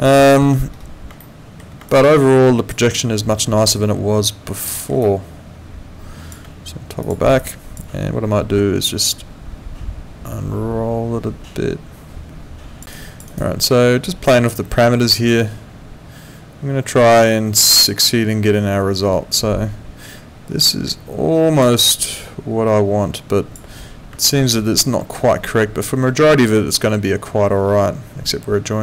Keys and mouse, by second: 0.1 alt+middle click, 1.2 alt+middle click, 1.9 alt+click, 4.7 alt+middle click, 5.0 alt+click, 7.0 click, 7.4 alt+click, 8.9 click, 13.0 alt+click, 13.3 alt+right click, 14.3 click, 21.8 alt+click, 24.2 alt+click.